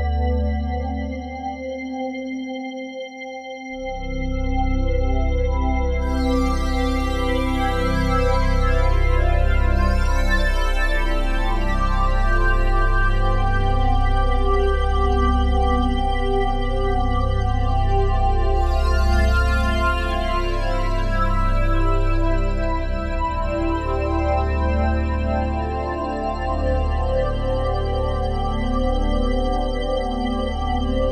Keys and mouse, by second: 5.2 a, 6.2 ctrl+alt+s, 7.8-10.5 drag, 12.3 /, 13.4 alt+click, 14.1 alt+click, 15.3 shift+click, 16.4 shift+click, 17.0 click, 18.0 shift+click, 18.8 shift+click, 19.3 click, 19.9 alt+click, 20.6 click, 21.3-23.1 alt+drag, 24.5 shift+click, 25.1-29.7 alt+shift+drag, 29.7 ctrl+p, 30.9 Return.